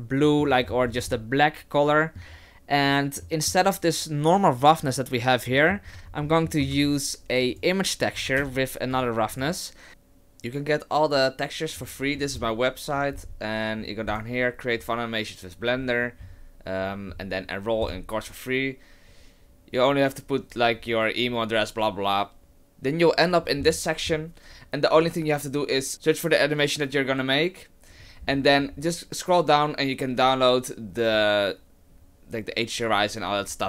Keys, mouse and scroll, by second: 0.6 middle click, 0.6-1.1 scroll up 7, 1.1 shift+middle click, 3.2 middle click, 5.5 middle click, 5.9-6.6 scroll down 6, 6.3 middle click, 6.7 shift+a.